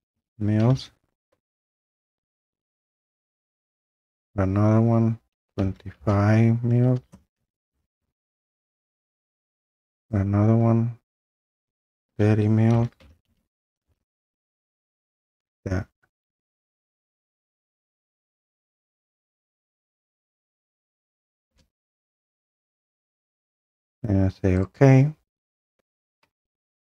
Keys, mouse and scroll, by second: 0.0-0.7 typing, 4.2 click, 5.4-8.5 typing, 10.0 click, 11.2-13.8 typing, 12.7 click, 13.6 click, 13.8-15.1 drag, 17.0 click, 19.1 click, 20.0 click, 20.1 click, 20.8 click, 22.4 click, 24.6 click.